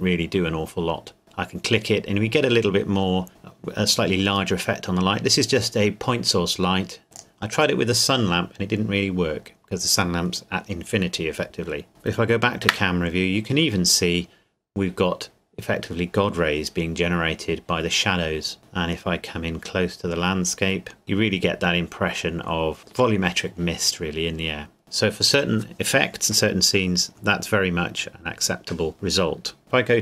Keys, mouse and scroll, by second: 1.2 click, 7.1 click, 11.9 middle click, 12.6 KP_0, 18.5-19.0 scroll up 1, 24.8 KP_0, 29.6 click.